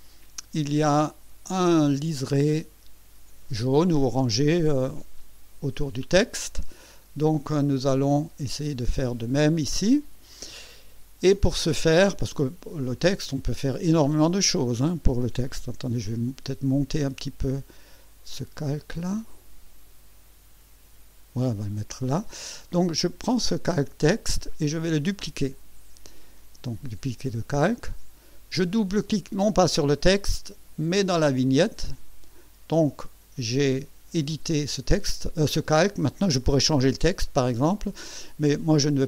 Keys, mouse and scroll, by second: 0.2 click, 2.0 click, 8.2 click, 10.0 click, 15.9 m, 18.6-21.5 shift+drag, 23.3 click, 26.7 click, 31.2 click.